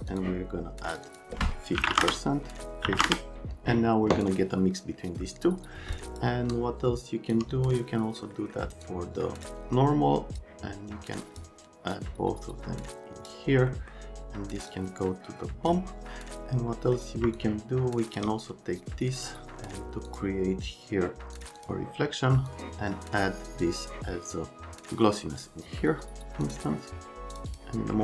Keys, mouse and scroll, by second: 0.1 click, 0.9 click, 1.0 click, 1.8 KP_5, 1.9 KP_0, 2.0 KP_Enter, 2.8 KP_5, 2.9 KP_0, 3.0 KP_Enter, 5.9 click, 6.5 shift+click, 8.3 right click, 8.8 click, 9.6 click, 11.1 click, 12.0 click, 13.7 right click, 14.7 click, 16.7 right click, 17.4 shift+click, 19.6 right click, 20.1 click, 21.3 click, 21.6 click, 22.5 click, 23.6-25.4 drag, 26.4 click, 27.3 click, 27.5 click.